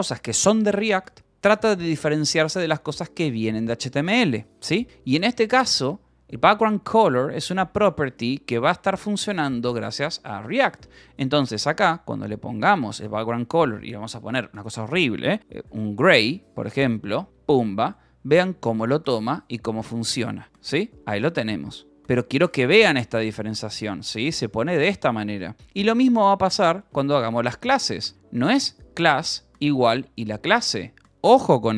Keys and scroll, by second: 5.0-9.8 typing, 10.9 shift+;, 11.5 space, 15.2-23.8 typing, 17.1 Escape, 17.5 ctrl+s, 24.9 Escape, 25.1 h, 26.9-29.8 typing.